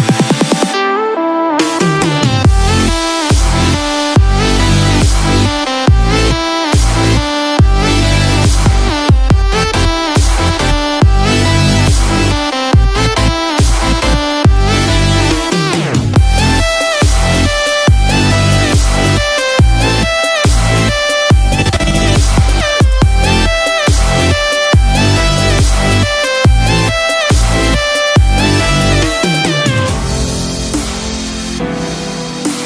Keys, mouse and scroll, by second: 0.3 middle click, 1.9 click, 2.3 scroll down 1, 2.4 middle click, 3.3 scroll up 5, 3.7 middle click, 5.0 click, 6.0 middle click, 7.9 middle click, 10.7-11.3 scroll down 2, 11.3 middle click, 11.3 scroll down 3, 16.3 scroll down 1, 16.6 middle click, 16.6-16.9 scroll down 2, 17.5-17.8 scroll up 1, 18.1 middle click, 19.9 scroll down 1, 20.3 middle click, 21.0 click, 22.4 shift+click, 24.9 middle click, 28.2 click, 31.6 middle click.